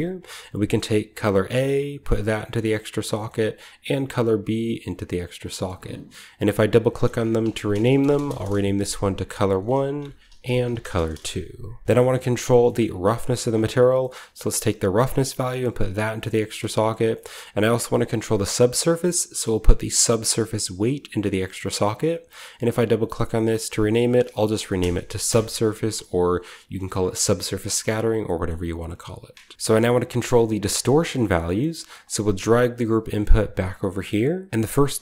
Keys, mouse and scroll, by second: 0.9-1.8 scroll up 1, 1.2 middle click, 1.2 typing, 1.9 click, 2.4-3.6 middle drag, 2.4-4.8 scroll up 1, 2.8-3.6 drag, 3.9-4.8 drag, 5.0-5.8 typing, 5.0 click, 5.3-6.5 scroll down 11, 6.5-7.7 drag, 7.5-14.4 typing, 8.1 shift+click, 9.3-11.1 drag, 11.8-12.6 scroll down 1, 12.0 middle click, 12.4 click, 12.6-15.6 scroll up 1, 13.4-14.8 drag, 16.0 drag, 16.5-18.0 drag, 16.7-18.3 scroll up 1, 20.1-22.5 drag, 22.6 click, 23.2 click, 23.9 click, 24.7 BackSpace, 25.2 Return, 27.9 middle click, 27.9 scroll down 1, 28.4-29.5 middle drag, 28.6 click, 29.5 typing, 30.2 middle click, 30.2 scroll down 1, 31.8-35.0 drag, 32.4 typing, 33.9-35.0 scroll up 2, 34.5 typing.